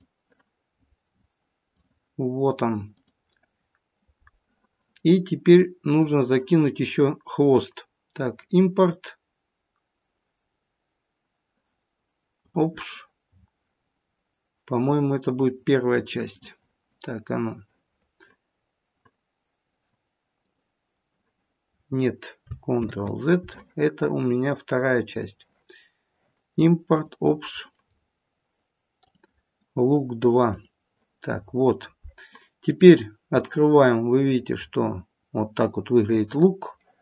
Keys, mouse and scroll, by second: 5.9 click, 22.7 ctrl+z, 25.0 click, 31.4-32.2 scroll up 5, 32.6 click, 33.4 middle click, 33.5 middle click, 34.5-35.7 scroll up 4, 36.7 middle click.